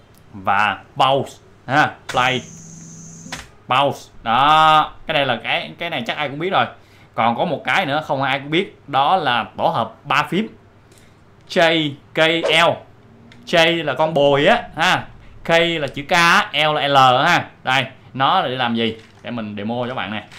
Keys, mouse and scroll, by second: 2.0 space, 3.3 space, 5.1-8.6 drag, 19.2 click.